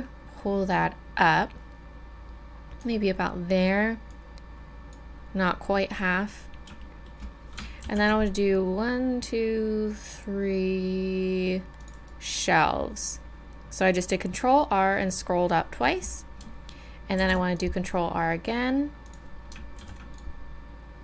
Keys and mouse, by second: 4.1-6.8 middle drag, 6.8-11.0 middle drag, 7.8 ctrl+r, 17.2 ctrl+r, 19.8 ctrl+r.